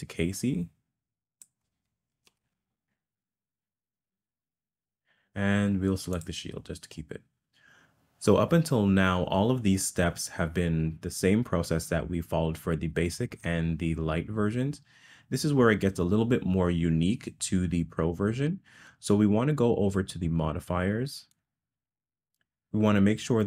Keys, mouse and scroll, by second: 6.2 click, 21.3 click.